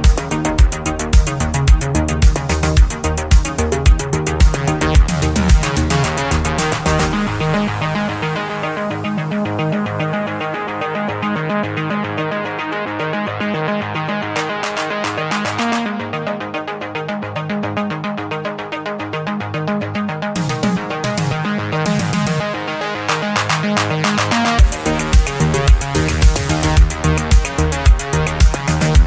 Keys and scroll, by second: 3.7 ctrl+z, 16.3 ctrl+z.